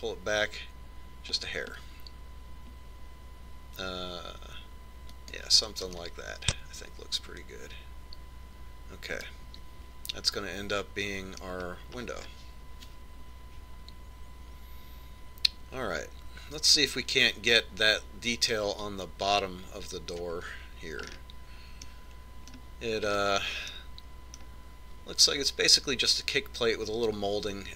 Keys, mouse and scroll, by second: 7.3-9.0 middle drag, 13.3-15.3 scroll up 1, 15.3 scroll up 1, 22.4 click, 23.2-26.9 middle drag.